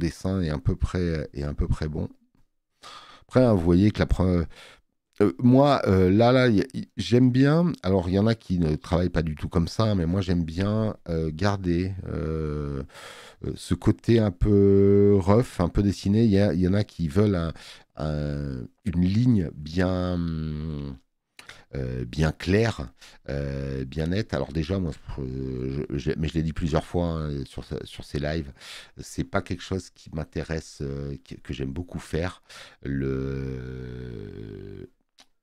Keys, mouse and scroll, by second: 10.0 space, 10.2 click.